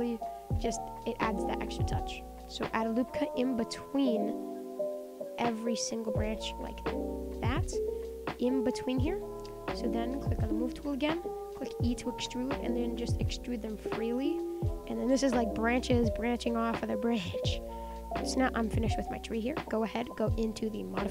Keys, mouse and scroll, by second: 0.0 KP_1, 0.5 Tab, 1.4 click, 2.8 click, 4.4 click, 4.8 click, 7.3 click, 7.9 click, 8.3 click, 8.8 click, 9.1 click, 9.4-10.5 middle drag, 10.5 click, 10.8 middle click, 11.4 e, 12.0 middle click, 13.0 click, 13.2 middle click, 13.6 e, 14.0 middle click, 14.8 click, 14.9 middle click, 15.5 e, 15.9 middle click, 16.6 click, 16.7 e, 17.1 middle click, 17.7 click, 17.8 middle click, 18.0 click, 18.3-19.4 middle drag, 19.4 click.